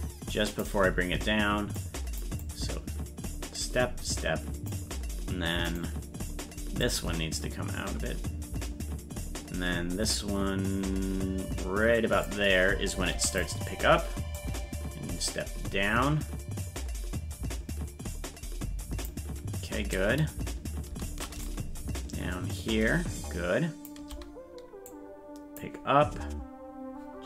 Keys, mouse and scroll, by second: 1.7 click, 2.4-4.7 drag, 5.7-6.8 right drag, 6.8-12.2 drag, 14.3-19.0 drag, 21.4-23.8 shift+drag, 24.9 click.